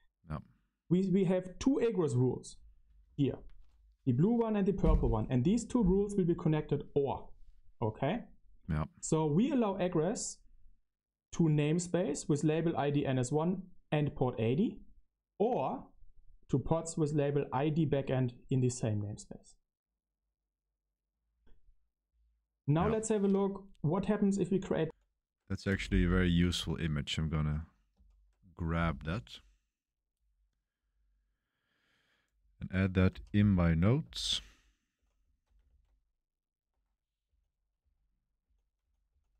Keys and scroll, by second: 24.8 Left, 25.6 space, 27.9 F13, 28.3 F13, 33.1 super+c, 33.6 super+c, 34.0 super+7, 34.0 super+c, 34.9 i, 35.4 BackSpace, 35.6 super+v, 36.6 Escape, 37.2-39.3 typing.